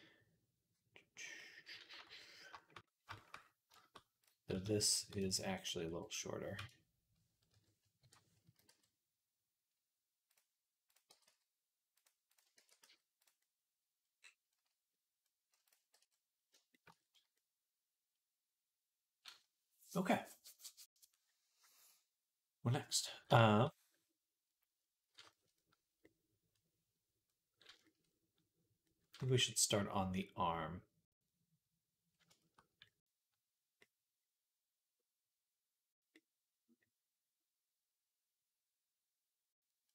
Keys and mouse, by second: 1.8-4.9 shift+middle drag, 4.1-5.2 drag, 4.3 s, 4.9 Escape, 5.2-10.7 middle drag, 5.5 s, 7.3 ., 8.3 s, 10.7 click, 10.8 middle click, 10.9 g, 12.4 ctrl+a, 15.5 click, 15.7 shift+c, 16.3-18.5 shift+middle drag, 23.3-25.4 shift+middle drag, 25.5-27.8 middle drag, 27.9 middle click, 29.1-32.8 shift+middle drag.